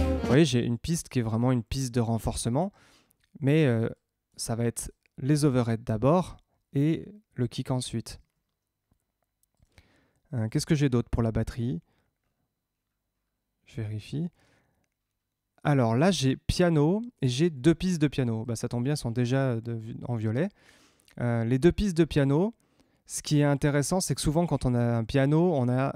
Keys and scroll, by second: 0.3 space, 2.5 Tab, 8.1 Tab, 25.6 Tab.